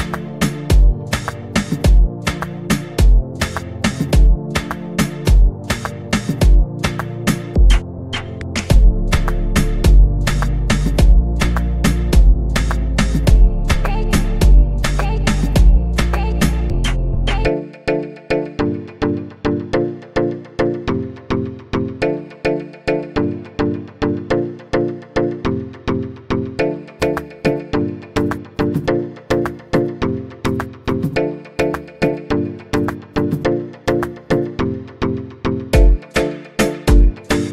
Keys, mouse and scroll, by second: 6.9 click, 8.2-12.0 drag, 17.9-18.8 scroll down 2, 18.8 click, 21.5-26.0 drag.